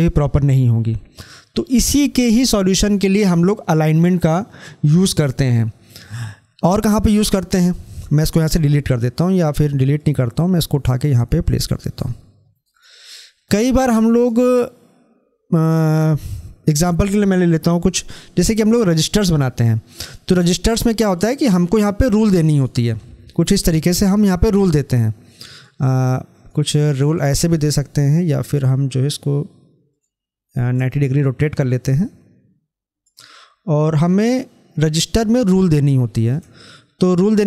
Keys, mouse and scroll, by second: 6.7 click, 6.9-9.5 drag, 9.8 click, 10.1-12.6 drag, 21.1-37.4 drag.